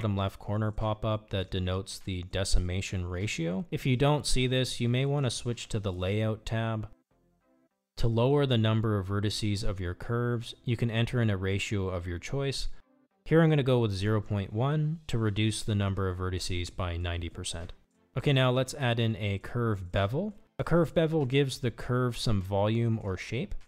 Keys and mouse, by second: 9.5-13.8 drag, 19.8 Tab, 23.2 Tab.